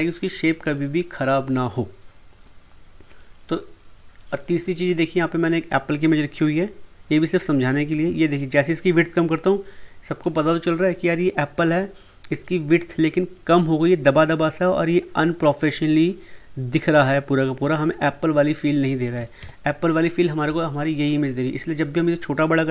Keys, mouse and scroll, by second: 3.1-4.6 drag, 7.8-11.6 drag, 19.1 ctrl+Num_Lock, 19.4 ctrl+z.